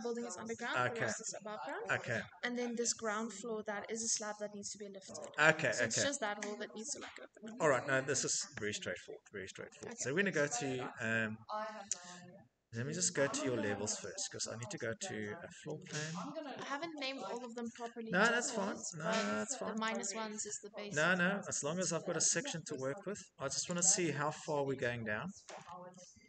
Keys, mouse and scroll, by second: 0.0 middle click, 1.6 shift+middle click, 4.0 middle click, 4.0 middle click, 7.4 middle click, 8.0 Escape, 8.3 click, 8.3 click, 8.5 click, 12.0 middle click, 12.1 middle click, 13.1 scroll, 14.5 click, 15.8-18.3 scroll, 18.8 click, 19.8 click, 20.0 click, 21.3-22.1 scroll, 22.7 scroll, 22.8 Escape, 23.6 click, 23.8 click, 25.5-26.2 scroll.